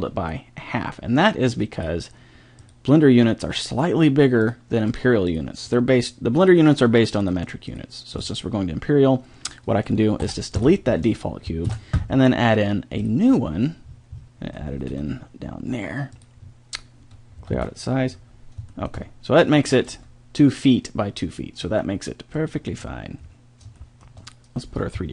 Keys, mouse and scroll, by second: 0.0 g, 2.6-7.1 drag, 7.4-9.5 drag, 10.1 right click, 10.2 Delete, 11.6 shift+a, 15.0 g, 17.5 alt+s, 19.9 g, 23.1-25.1 drag.